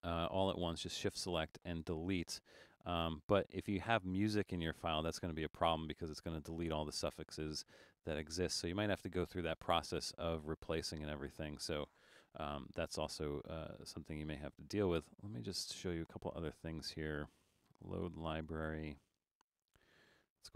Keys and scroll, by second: 12.3 super+z.